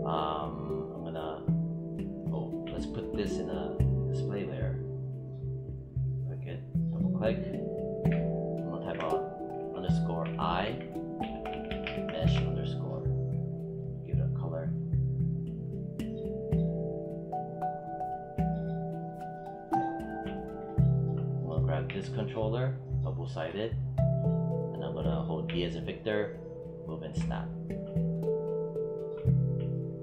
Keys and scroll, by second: 7.9 BackSpace, 9.5-12.1 typing, 21.7 w, 25.3 v.